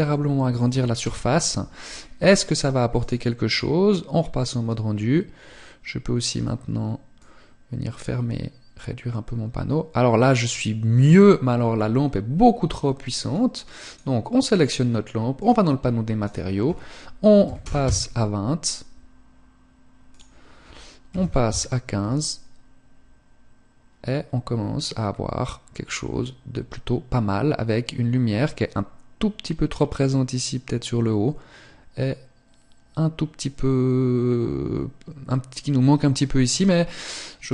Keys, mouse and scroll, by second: 6.8 click.